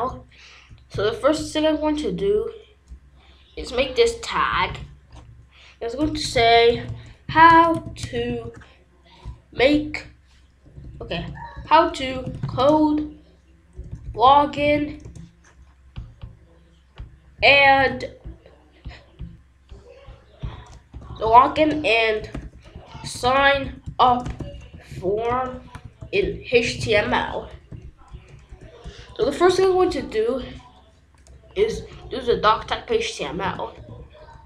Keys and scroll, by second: 2.1 ], 3.5 BackSpace, 4.5 -, 5.9-8.6 typing, 10.6 BackSpace, 11.7-15.2 typing, 17.1-18.3 typing, 20.9 Left, 21.5-27.4 typing, 28.0 Return, 28.7-30.3 typing, 31.7 BackSpace, 32.7 shift+1, 34.1 Return.